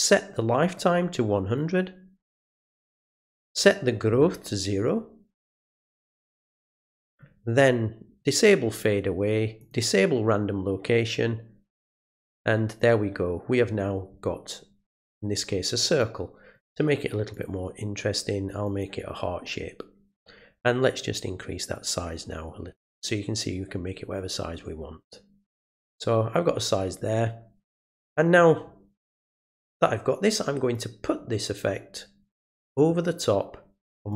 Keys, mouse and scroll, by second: 0.7 click, 2.4 click, 6.3 click, 8.2 click, 9.6 click, 16.0 click, 17.3 click, 18.6 click, 21.7-25.5 drag, 30.7-34.1 drag.